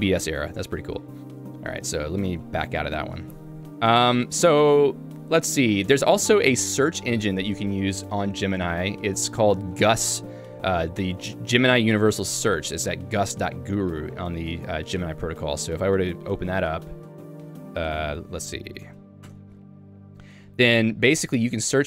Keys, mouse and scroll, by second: 2.4 q, 5.9 j, 12.3 v, 12.6-13.7 h, 15.1 y, 18.0 Return, 19.3 Return, 21.1 j.